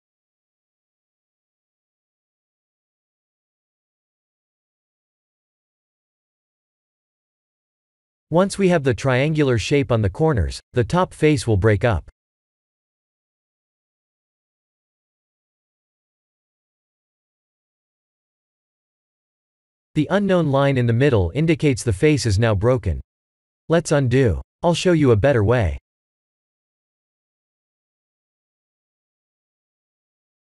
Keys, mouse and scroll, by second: 0.9 shift+click, 1.3 middle click, 2.4 shift+click, 2.9 middle click, 3.5-3.9 scroll down 4, 4.2 ctrl+b, 11.9 Tab, 12.5 KP_1, 12.8 KP_7, 13.6 shift+z, 14.2 shift+middle click, 14.8-15.5 scroll up 3, 15.5-15.8 scroll up 1, 16.0 Tab, 18.5 Tab, 19.3 middle click, 20.2 shift+middle click, 20.9 middle click, 23.4 click, 23.8 middle click, 25.8 Tab, 27.6 ctrl+z, 27.9 ctrl+z, 28.3 ctrl+z, 28.6 ctrl+z, 28.9 ctrl+z, 29.2 ctrl+z, 29.5 ctrl+z, 30.1 middle click.